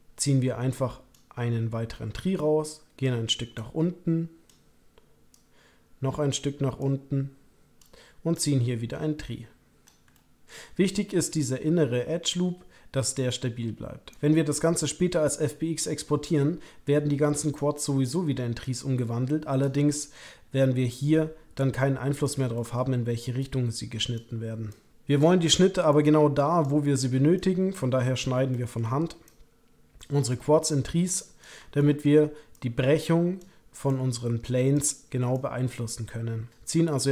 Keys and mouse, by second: 3.0 click, 3.5 click, 5.3 click, 8.3-9.8 ctrl+drag, 10.1 middle click, 14.1 ctrl+click, 15.9-17.5 ctrl+drag, 18.6-19.7 ctrl+drag, 19.9 shift+click, 20.9-22.4 ctrl+drag, 22.5 shift+click, 23.4 click, 24.7 click, 25.9 click, 28.5 shift+middle click, 29.2 middle click, 30.5 middle click, 31.7 shift+middle click, 32.5-35.3 middle drag, 35.3-36.5 drag.